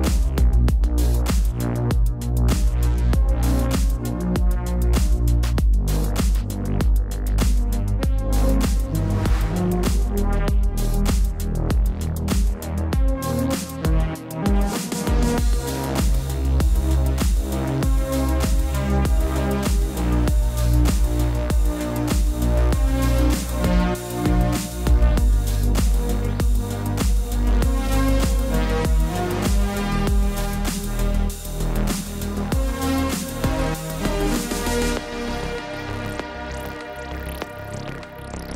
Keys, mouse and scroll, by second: 0.8 click, 2.6 right click, 4.6 click, 7.6 right click, 9.2 right click, 9.3 click, 17.3 1, 18.4 click, 22.9 typing, 23.2 click, 26.2 click, 31.0 click, 34.0 click.